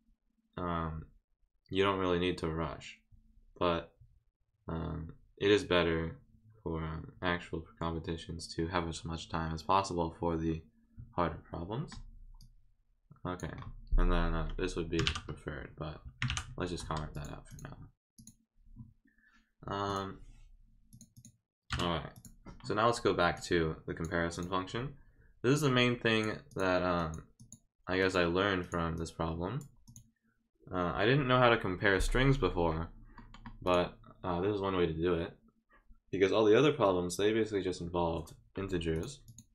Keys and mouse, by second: 12.4-13.4 drag, 17.1 click, 17.5 click, 18.2 click, 19.9 click, 20.9 click, 21.1 click, 22.1 click, 23.3 click, 24.3 click, 25.5 click, 26.5 click, 27.0 click, 27.4 click, 28.0 click, 28.6 click, 28.9 click, 29.8 click, 33.6 click, 38.9 click, 39.2 click.